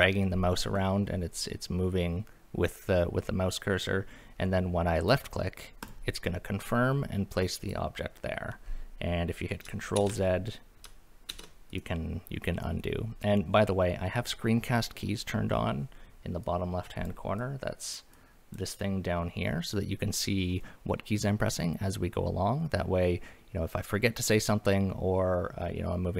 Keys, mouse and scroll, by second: 5.8 click, 7.6 click, 10.0 ctrl+z, 11.3 ctrl+z, 11.7 click, 16.4-17.1 drag, 17.4 click, 18.1 click.